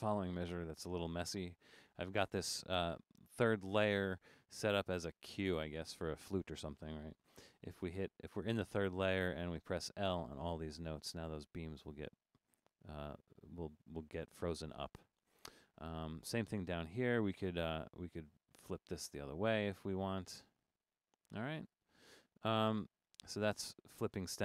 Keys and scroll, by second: 0.0 Right, 0.7 Right, 1.9 Right, 2.3 Right, 4.5 shift+Down, 4.8 shift+Down, 9.1 l, 9.6 Right, 9.8 l, 10.1 Right, 10.3 l, 10.6 Right, 10.9 l, 18.2 l, 18.6 Right, 19.1 l, 20.0 Return.